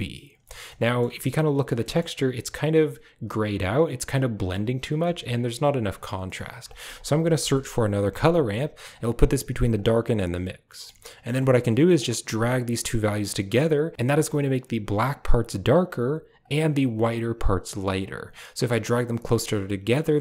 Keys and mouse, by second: 0.8 shift+click, 1.8 shift+click, 6.1 click, 6.5 shift+a, 9.9 click, 10.0 click, 11.9-12.5 drag, 13.0-13.9 drag, 14.0-15.8 drag, 16.3-17.8 drag, 18.0-19.0 drag, 19.3-20.2 drag.